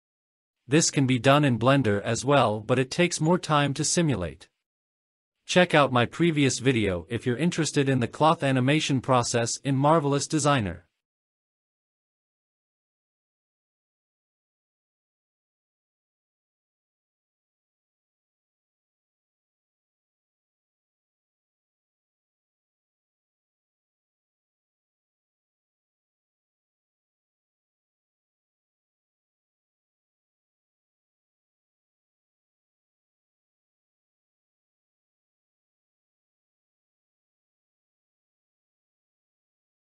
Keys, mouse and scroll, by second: 0.5 click, 3.2-3.6 scroll down 5, 3.3 middle click, 3.6 scroll up 1, 3.7 scroll down 1, 4.3 click, 4.7 click, 4.9 click, 10.9-13.0 scroll up 2, 13.9-14.3 drag, 15.1 click, 16.5 click, 17.7-18.3 scroll down 4, 19.4 click, 22.0 click, 22.9-24.5 drag, 25.7-26.0 scroll up 2, 27.3 scroll down 2, 27.5-28.8 middle drag, 29.5-29.8 scroll up 3, 29.8-30.4 scroll down 2, 30.8-31.6 scroll up 2, 31.6 scroll down 1, 32.0 shift+middle drag, 33.3 click, 34.2 n, 35.3-36.5 drag, 36.8 scroll down 2, 37.5 click, 38.5-39.6 drag.